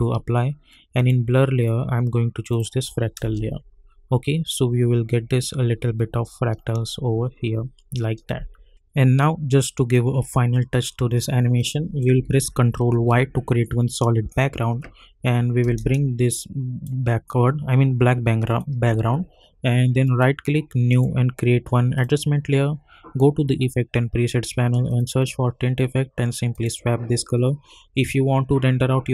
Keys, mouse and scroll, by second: 3.2 space, 8.8-11.6 drag, 12.9 ctrl+y, 15.6 Return, 16.3-18.5 drag, 20.0 right click, 20.9 click, 24.9 click.